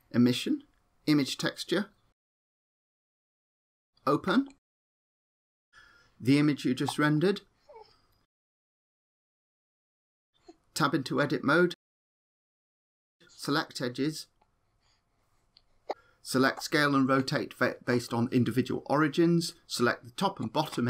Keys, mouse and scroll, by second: 0.1 click, 1.9 click, 4.1 click, 11.6 Tab, 13.4 click, 14.3 click, 14.7 r, 16.7 click.